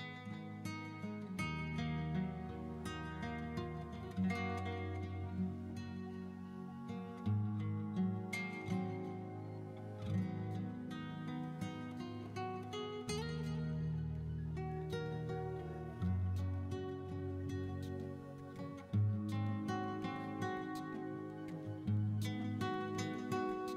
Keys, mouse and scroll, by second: 0.2 shift+right click, 0.6 middle click, 0.8 x, 1.7 middle click, 2.2 middle click, 2.2 scroll down 3, 2.8 scroll down 4, 3.0 click, 3.1 middle click, 3.2 shift+middle click, 3.5 middle click, 3.5 shift+middle click, 3.7 middle click, 3.9 1, 4.0 click, 4.2 click, 4.7 ctrl+KP_Add, 5.0 ctrl+KP_Add, 5.2 middle click, 5.4 shift+middle click, 5.5 scroll up 1, 5.6 shift+d, 5.7 right click, 5.9 middle click, 6.2 ctrl+z, 6.8 right click, 7.0 middle click, 7.5 middle click, 7.8 alt+right click, 8.5 alt+shift+right click, 9.2 middle click, 9.5 click, 10.0-10.5 scroll up 6, 10.2 middle click, 10.5-10.8 scroll down 2, 10.7-11.7 middle drag, 12.4 right click, 12.5 middle click, 12.6 scroll down 2, 12.7 middle click, 13.0 middle click, 13.3 alt+right click, 13.7 alt+shift+right click, 13.8 shift+middle click, 14.0 middle click, 15.0 middle click, 15.3 KP_9, 15.7 KP_7, 15.8 alt+middle click, 16.0 scroll up 1, 16.2 scroll down 2, 16.2 alt+z, 16.4 alt+z, 16.6 1, 16.7 click, 17.1 shift+click, 17.6 scroll down 1, 17.8 shift+s, 18.2 middle click, 18.5 shift+middle click, 18.6 scroll down 1, 18.7 click, 19.6 ctrl+KP_Add, 19.7 ctrl+KP_Add, 20.2 ctrl+KP_Add, 21.2 right click, 21.2 shift+d, 21.7 shift+middle click, 22.3 click, 22.7 shift+middle click, 23.1-23.7 typing.